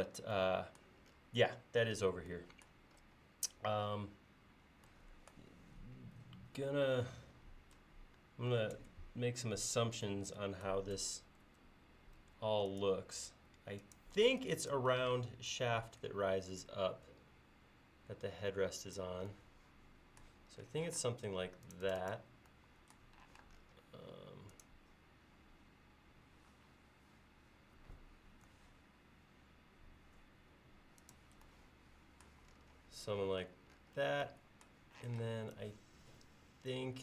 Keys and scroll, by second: 8.8 c, 11.0 Tab, 11.5 shift+Tab, 14.2 e, 21.0 space, 23.4 m, 28.5 Left, 35.1 p.